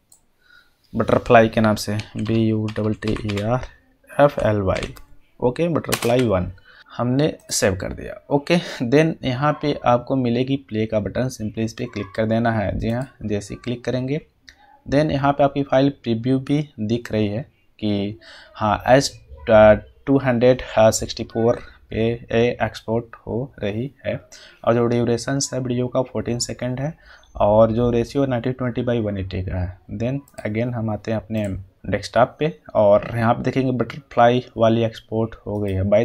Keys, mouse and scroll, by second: 1.7-6.0 typing, 7.3 click, 12.9 click, 13.3 click, 30.2 click, 35.5 click.